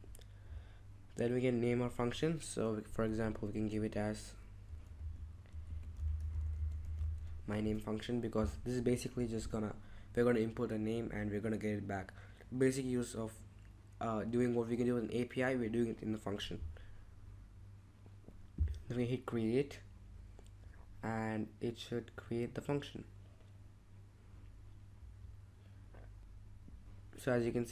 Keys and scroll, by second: 4.6-7.6 typing.